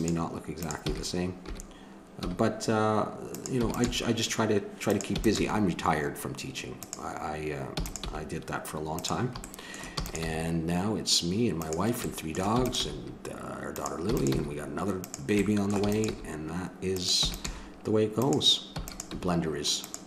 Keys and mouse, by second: 0.8 e, 3.6 e, 3.9 g, 5.1 e, 5.4 g, 7.7 e, 8.1 g, 9.4-10.9 middle drag, 10.0 e, 12.5 e, 13.0 g, 14.1 e, 14.3 g, 15.5 click, 15.9 e, 16.1 g, 17.2 e, 17.5 g, 18.8 e, 19.1 g.